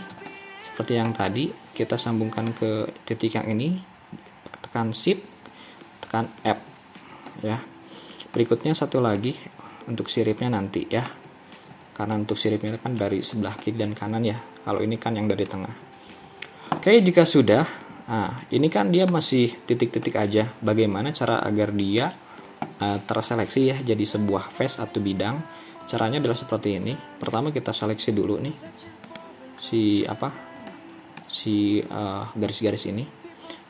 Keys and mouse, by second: 0.3 middle click, 6.6 f, 7.3-8.4 middle drag, 9.2-11.2 middle drag, 12.2 middle click, 13.6-15.6 middle drag, 16.1 KP_3, 17.6-19.2 middle drag, 20.1-22.1 middle drag, 30.8 middle click.